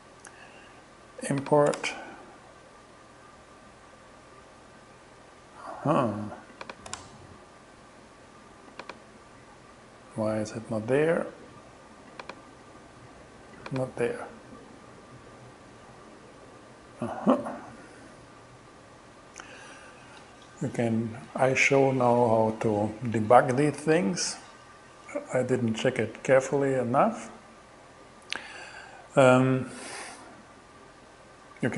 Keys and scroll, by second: 1.8 shift+Return, 7.0 shift+Return.